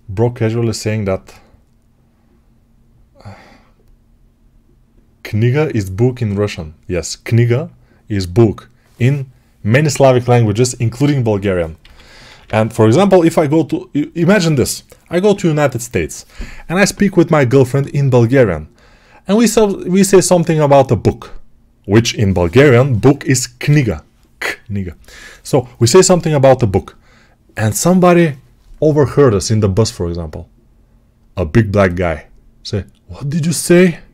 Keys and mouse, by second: 11.7 g, 12.1 ], 12.3 ].